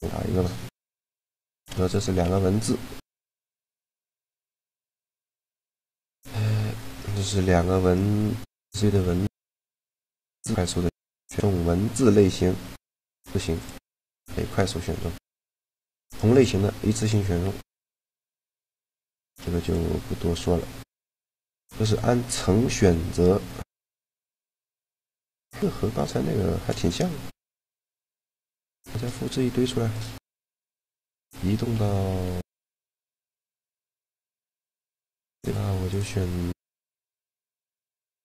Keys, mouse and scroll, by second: 0.7 shift+d, 1.3 shift+d, 1.9 Tab, 3.2-4.3 typing, 4.5 KP_Enter, 5.7-6.9 drag, 6.3 Tab, 8.8 a, 10.5-11.7 drag, 13.9 click, 14.2 g, 15.7 g, 16.8 a, 19.3-21.3 drag, 24.7 click, 28.6 shift+d, 31.3 m, 33.7 `, 34.4 a, 34.8 right click, 35.6 click, 36.4 click, 37.9-38.2 drag.